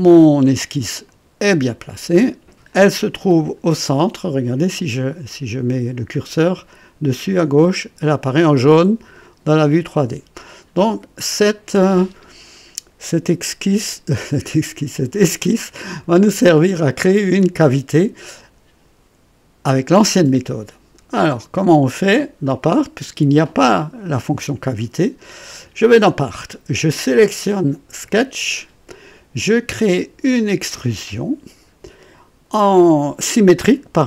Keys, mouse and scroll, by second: 1.0 click, 2.7 click, 22.4 click, 25.8 click, 28.0 click, 30.6 click, 33.6 click.